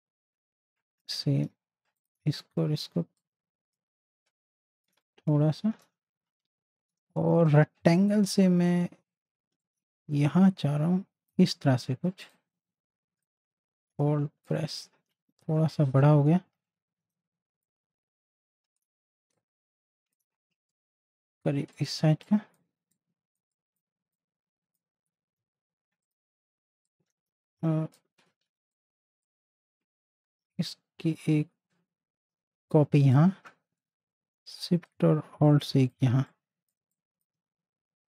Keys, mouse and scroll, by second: 3.2-5.0 alt+shift+drag, 7.3 m, 9.6-12.3 drag, 13.3-15.0 alt+drag, 15.0 ctrl+z, 17.6-19.3 alt+shift+drag, 19.3-21.7 drag, 22.0 z, 22.2 click, 23.4 space, 23.5 click, 25.4 v, 26.0-28.4 drag, 28.4 ctrl+z, 28.7-33.1 drag, 33.1-35.8 drag, 36.0 z, 36.3 click, 36.8 space, 36.9 click.